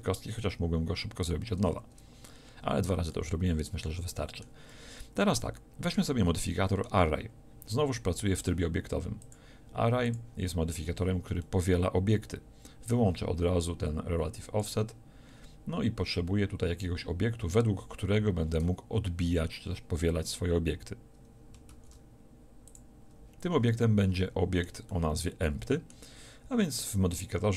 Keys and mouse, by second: 1.6 Tab, 9.2-18.4 drag, 21.7 shift+a, 23.8-26.8 drag, 26.8-27.5 right drag.